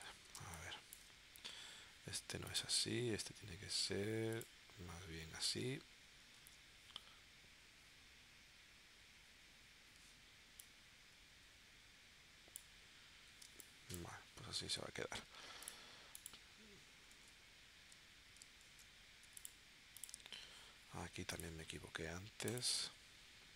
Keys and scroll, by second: 0.3 space, 6.3 shift+w, 13.5 space, 17.2 super+z, 17.9 v, 18.6 shift+super+z, 19.3 v.